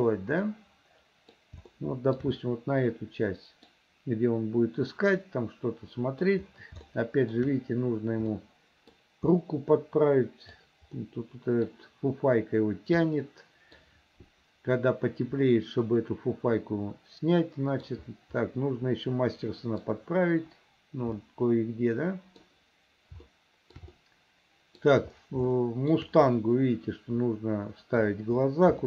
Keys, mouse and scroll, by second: 0.5 middle click, 1.8 shift+middle click, 2.5-3.8 middle drag, 5.3-6.4 middle drag, 7.0 shift+middle click, 8.4 middle click, 9.4-10.6 middle drag, 11.0 middle click, 13.2 middle click, 15.5-18.0 middle drag, 18.5-19.9 middle drag, 21.3-22.5 middle drag, 23.3 shift+middle click, 24.0 middle click, 25.5 shift+middle click.